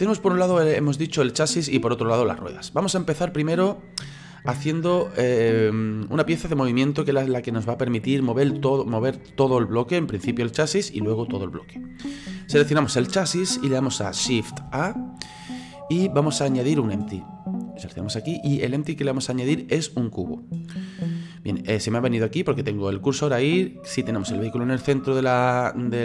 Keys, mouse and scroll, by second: 14.6 shift+a, 21.5-26.0 middle drag.